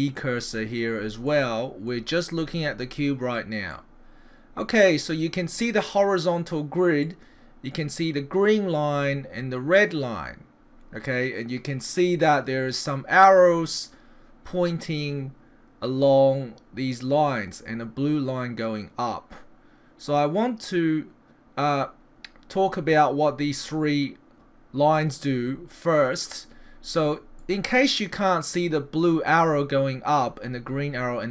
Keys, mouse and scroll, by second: 1.3 middle click, 3.7 middle click, 7.0 middle click, 9.8 middle click, 27.4 middle click.